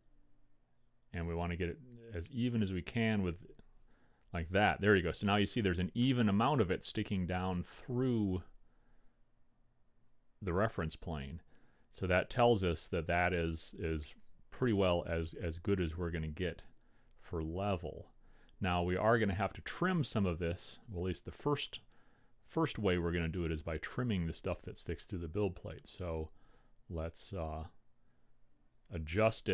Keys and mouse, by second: 23.4-25.2 drag.